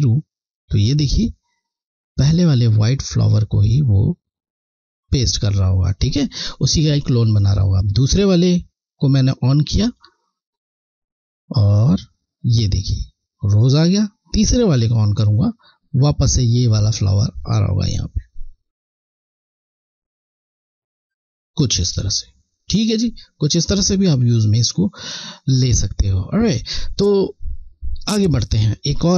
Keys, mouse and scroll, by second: 6.0-7.4 scroll, 9.5 click, 17.3 click, 17.8 click, 22.2-22.5 scroll, 23.0 alt+scroll down 1.